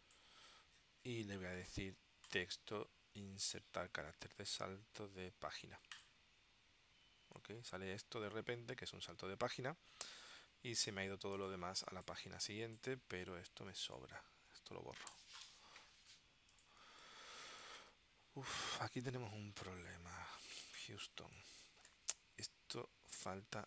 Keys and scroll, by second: 11.8 space, 15.2 BackSpace, 17.0 space, 18.9 space.